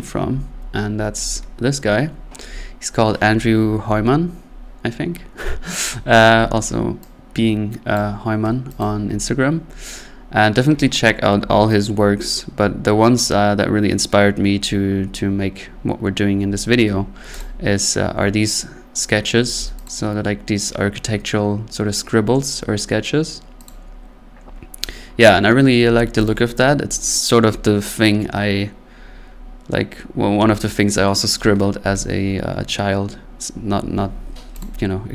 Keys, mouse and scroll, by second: 0.4-17.4 drag.